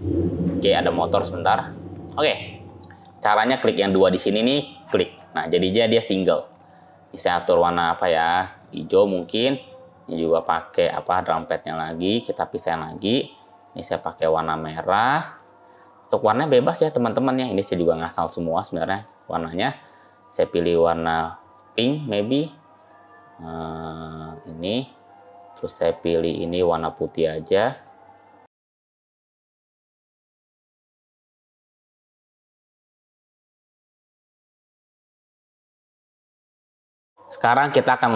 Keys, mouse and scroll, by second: 2.6 middle click, 4.7 click, 6.3 click, 10.1 click, 12.5 click, 15.2 click, 16.2 click, 19.5 click, 21.6 click, 26.4 click, 27.6 click, 28.9 ctrl+z, 29.1 click, 29.3 click, 29.8 click, 30.0 click, 30.7 click, 31.1 click, 31.5 ctrl+z, 31.7 click, 31.9 click, 32.5 click, 32.7 click, 33.6 ctrl+z, 33.7 click, 33.9 click, 34.7 click, 34.9 click, 35.4 click, 35.9 click, 36.6 click, 36.9 click, 37.0 middle click, 37.6-38.0 scroll up 2, 38.0 shift+middle click.